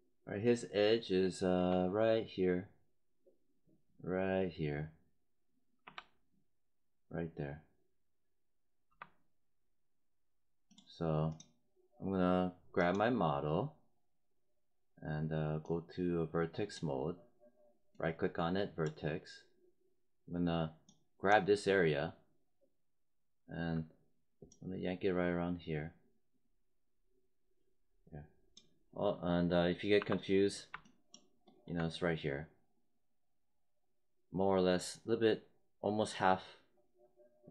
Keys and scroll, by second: 5.7 3, 8.8 1, 29.9 5.